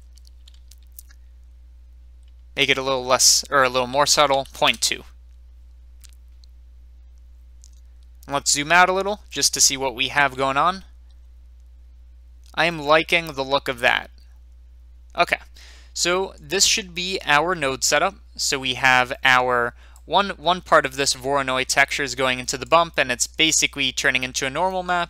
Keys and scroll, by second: 4.3-5.3 typing.